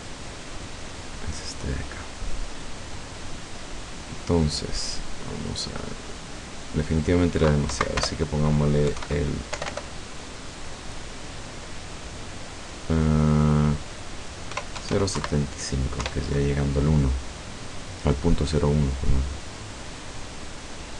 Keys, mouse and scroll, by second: 0.6 right click, 5.0 right click, 6.6 click, 7.8 Right, 8.0 BackSpace, 8.9 KP_7, 9.1 KP_5, 9.6 BackSpace, 14.6 KP_0, 14.8 KP_7, 15.0 KP_5, 15.2 KP_Enter, 16.1 F12.